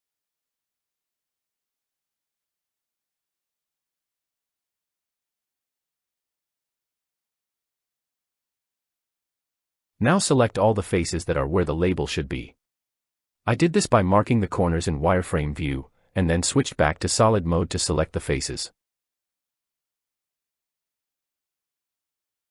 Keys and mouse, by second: 2.6 shift+middle click, 3.7 shift+middle click, 4.7 click, 11.2 click, 13.4 shift+click, 14.7 shift+click, 16.1 click, 18.7 click, 20.1 click, 20.3-22.5 drag.